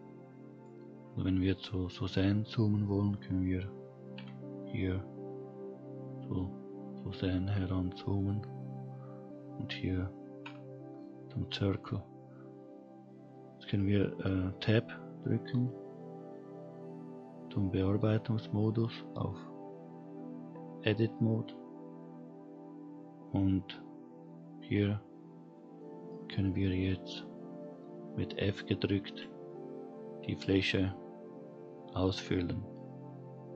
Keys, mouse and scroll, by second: 0.9-1.5 scroll down 2, 1.5 click, 4.1 KP_Decimal, 5.9-7.0 scroll down 3, 8.1 click, 10.4 KP_Decimal, 11.3-11.8 scroll down 3, 11.8-12.3 scroll up 2, 15.5 Tab, 25.1-25.5 scroll down 1, 25.5 middle click, 26.4-28.1 scroll up 1, 29.0 f.